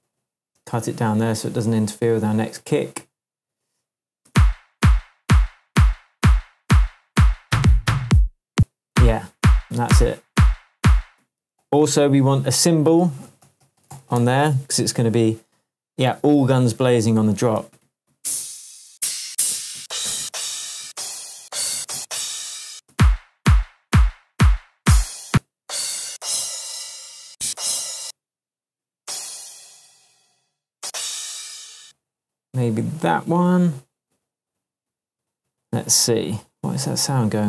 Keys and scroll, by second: 4.2 space, 8.5 space, 11.2 space, 11.6 super+t, 13.0 super+r, 13.4-14.4 typing, 16.0 Left, 16.4 Up, 17.1 Right, 17.6 Down, 17.8 Right, 18.1 Down, 19.2 Down, 21.7 Up, 22.7 space, 25.3 space, 26.0 Down, 27.2 Down, 27.4 Up, 28.0 space, 30.8 Up, 31.8 space.